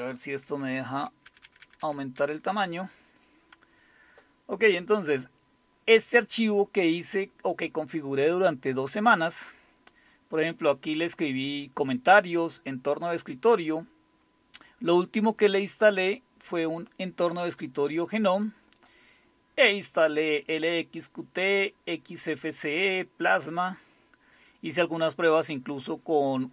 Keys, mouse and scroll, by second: 0.8 ctrl++, 1.0 ctrl++, 1.3 ctrl++, 1.4 ctrl++, 1.6 ctrl++, 2.2 ctrl++, 4.5 click, 5.8-7.0 scroll down 1, 7.3-8.2 scroll down 1, 8.7-10.2 scroll down 1, 10.2-10.9 scroll down 1, 10.9 scroll down 1, 13.0-14.3 scroll down 1, 15.4-18.0 drag, 18.7 click, 19.1-19.6 scroll down 2, 20.7-21.5 scroll down 2, 21.5-24.3 scroll down 2, 24.3-24.9 scroll down 1, 24.9-25.7 scroll down 1.